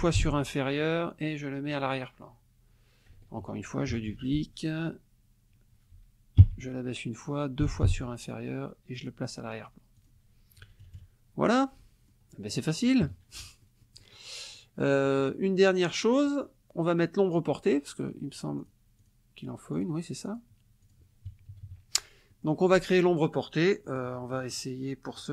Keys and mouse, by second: 1.7 click, 3.9 ctrl+d, 6.4 Down, 7.6 <, 8.9 click, 10.0 click, 10.6 KP_Subtract, 11.8 click, 13.0 KP_Subtract, 13.6 click, 14.6 click, 16.3 click, 18.6 click, 19.0 click, 19.7 click, 20.3 click, 20.8 click, 21.5 KP_Subtract, 22.3 middle click, 23.8 middle click, 25.1 middle click.